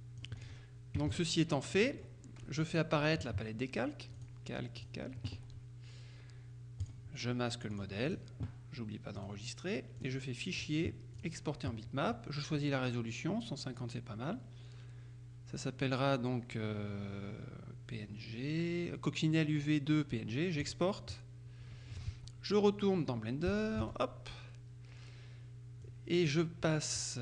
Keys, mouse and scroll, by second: 0.5 click, 1.0 KP_Subtract, 1.9 click, 2.2 middle click, 4.3 click, 5.1 click, 6.9 click, 7.8 click, 9.3 click, 10.1 click, 11.2 click, 20.7 click, 22.4 alt+Tab, 23.6 Tab, 25.9 click.